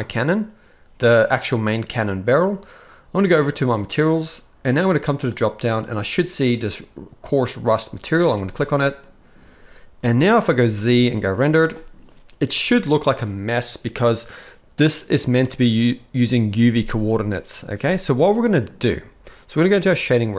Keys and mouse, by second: 5.3-8.5 drag, 10.5 z, 17.8 z.